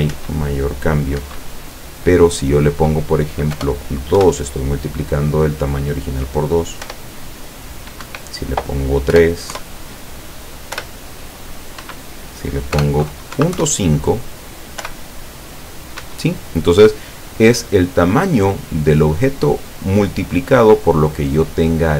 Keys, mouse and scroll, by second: 0.2 p, 1.2 Escape, 2.5 click, 3.6 BackSpace, 4.4 KP_2, 6.8 p, 8.1 Escape, 9.2 BackSpace, 9.6 KP_3, 10.7 p, 11.9 Escape, 13.6 KP_5, 14.9 p, 16.1 Escape.